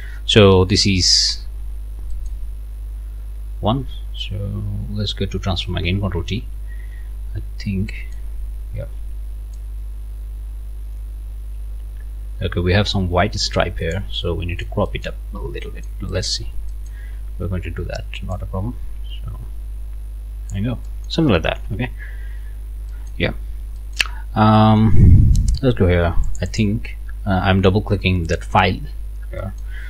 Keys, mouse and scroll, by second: 0.4-0.7 scroll up 1, 1.6 scroll up 2, 2.1 middle click, 6.4 ctrl+t, 7.4-8.6 scroll up 6, 7.9 middle click, 9.5-14.1 drag, 14.2 click, 15.2 scroll down 1, 15.6 click, 16.1 click, 16.7 click, 17.2 scroll up 2, 18.3-20.7 drag, 20.8 scroll up 2, 20.9 click, 21.6 Return, 22.0 scroll down 2, 22.6 scroll down 1, 22.9 middle click, 23.3-24.3 scroll up 2, 23.8 middle click, 24.6 middle click, 26.2 middle click, 28.6 scroll down 1, 29.1 scroll up 1, 29.4 middle click.